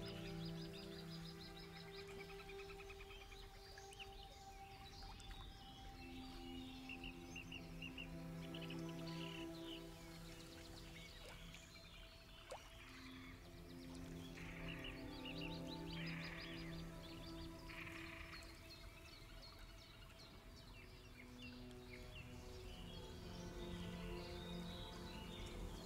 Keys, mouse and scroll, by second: 1.4 click, 2.7 alt+click, 3.8 click, 5.5 click, 6.9 click, 8.6 click, 10.1 click, 11.5 click, 12.8 alt+click, 14.4 click, 15.9 alt+click, 17.1 click, 18.5 click, 19.5 alt+click, 20.8 click.